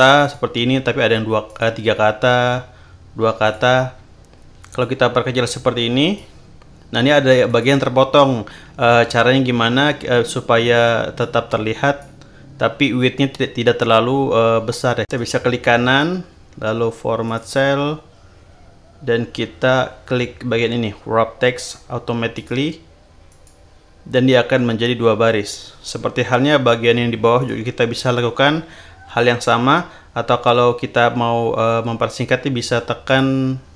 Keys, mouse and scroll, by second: 0.2 click, 0.6-1.0 scroll up 1, 1.4 click, 1.9 scroll up 2, 3.4 click, 4.8-6.4 drag, 7.4 click, 11.2 click, 15.1 right click, 17.2 click, 22.3 click, 23.2 click, 25.8 scroll down 2, 27.4 click, 33.0 click.